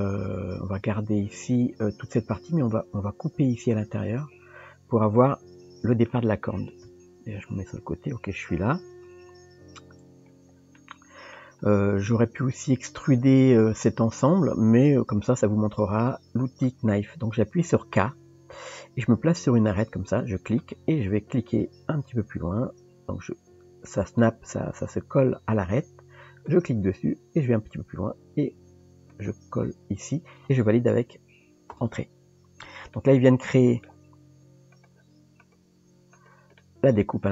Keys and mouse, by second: 5.0-6.1 middle drag, 6.8 KP_3, 9.2 KP_1, 10.8 middle click, 32.9 middle click, 34.8 click, 35.4 click, 36.2 click, 36.6 middle click.